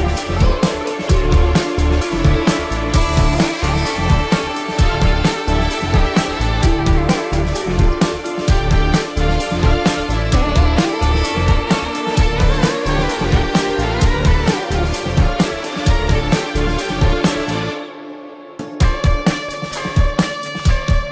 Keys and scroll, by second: 0.7 ctrl+=, 2.4 ctrl+=, 2.6 space, 3.5 ctrl+=, 3.6 space, 4.5 ctrl+alt+z, 5.3 ctrl+alt+z, 7.9 ctrl+alt+z, 9.6 ctrl+alt+z, 12.3 space.